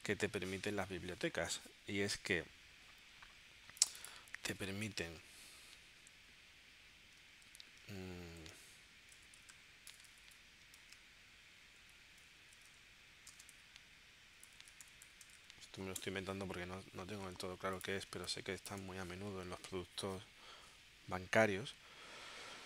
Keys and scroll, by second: 8.5-10.0 typing, 11.9-15.8 typing, 16.1 Return, 18.2 space.